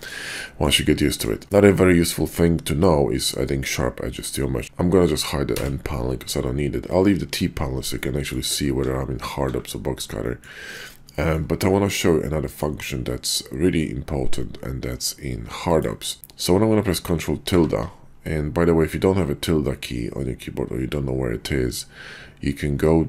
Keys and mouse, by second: 0.4 middle drag, 1.0 middle click, 4.6 n, 7.9-8.3 shift+drag, 8.8 alt+w, 9.4 alt+w, 10.3 shift+drag, 11.1 shift+drag, 11.7-12.6 drag, 12.9-13.8 shift+drag, 16.2 ctrl+`, 17.5 ctrl+`.